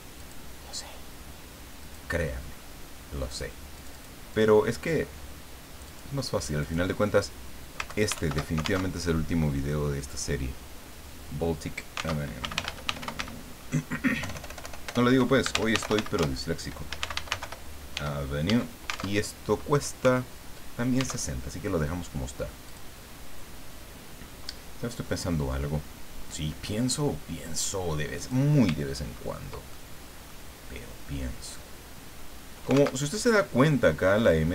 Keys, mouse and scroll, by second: 0.2 click, 1.8 click, 3.3 click, 3.7 click, 4.3 click, 5.8 click, 6.6 click, 7.9 ctrl+Home, 8.2 ctrl+shift+End, 8.9 ctrl+alt+shift+Tab, 12.2 alt+Tab, 12.4 alt+b, 12.5 alt+l, 12.6 alt+a, 12.8 alt+t, 13.0 alt+i, 13.2 alt+c, 14.2-17.9 typing, 19.1 alt+Tab, 21.2 alt+Tab, 22.6 click, 28.2 click, 29.0-29.8 ctrl+scroll up 2, 29.8 ctrl+middle click, 30.1 click, 32.9 alt+Tab.